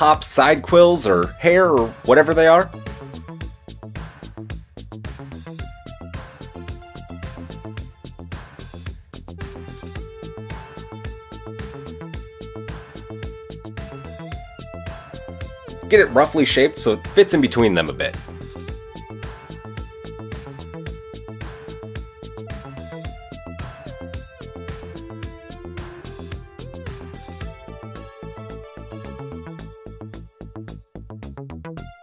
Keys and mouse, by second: 2.1-7.9 middle drag, 6.6 g, 8.1 g, 8.2 shift+middle click, 9.8 Tab, 9.8-10.9 middle drag, 12.1 click, 14.3 click, 15.7 g, 20.4 click, 21.4-21.9 drag, 24.4 g, 25.9-26.5 drag, 28.7 g, 31.2-31.7 drag.